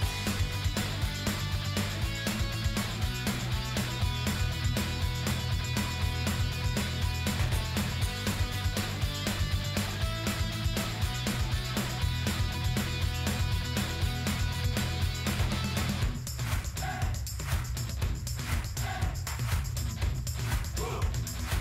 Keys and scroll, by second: 4.5 ctrl+d.